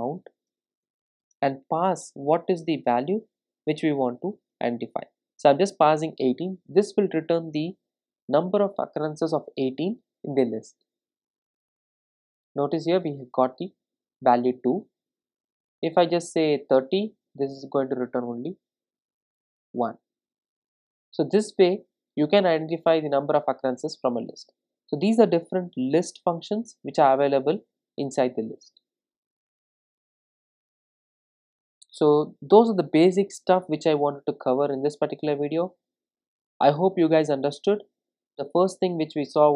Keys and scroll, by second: 11.1 super+r, 19.0 ctrl+r.